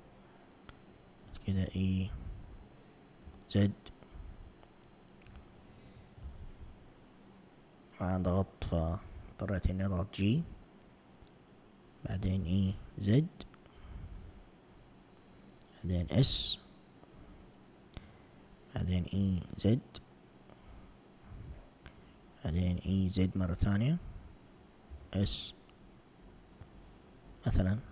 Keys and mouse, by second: 1.3 e, 3.3 z, 4.3 Escape, 5.3 z, 6.3 g, 9.2 s, 12.5 e, 16.1 s, 19.0 e, 22.6 e, 25.0 s.